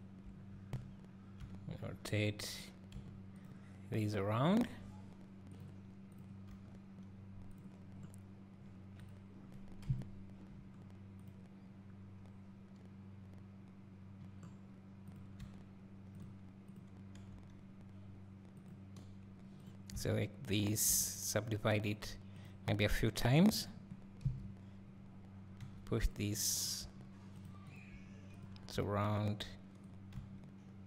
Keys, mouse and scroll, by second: 0.6 scroll, 1.4 r, 2.6 r, 4.6 r, 6.2 click, 6.6 r, 7.8 click, 7.8 scroll down 1, 9.1 click, 9.9 KP_1, 11.3 click, 14.2 scroll down 1, 15.2 click, 15.4 g, 17.3 g, 19.7 click, 20.6 shift+click, 22.8 right click, 23.6 click, 24.2 KP_7, 25.6 g, 26.8 g, 27.4 right click, 27.8 click, 27.9 g, 28.4 click, 28.7 r.